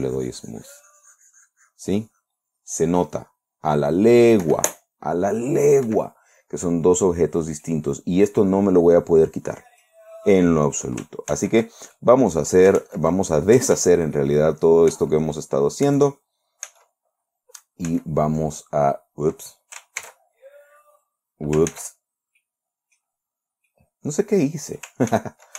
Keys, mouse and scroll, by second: 6.3 Escape, 8.1-10.5 middle drag, 11.8 ctrl+z, 12.4 ctrl+click, 13.3 ctrl+z, 14.2 ctrl+z, 15.4 ctrl+z, 16.3 ctrl+z, 17.1 ctrl+z, 18.3 ctrl+z, 20.5 ctrl+shift+z, 22.2 ctrl+z, 22.9 middle click, 22.9 scroll down 2, 23.5 scroll up 2, 23.7-24.1 scroll down 2, 24.1-25.5 middle drag.